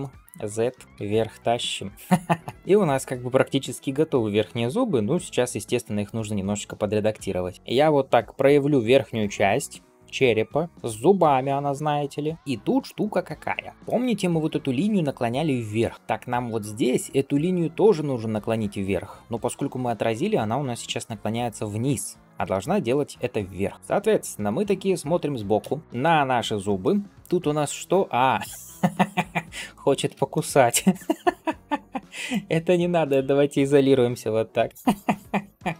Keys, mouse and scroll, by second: 0.8 g, 1.9 middle click, 13.7 middle click, 25.4 KP_3, 25.8 shift+middle click, 26.5 scroll down 1, 27.1-27.6 scroll down 2, 29.0 scroll up 2, 30.2-30.6 shift+middle drag, 32.1-33.0 drag, 35.0 KP_Divide.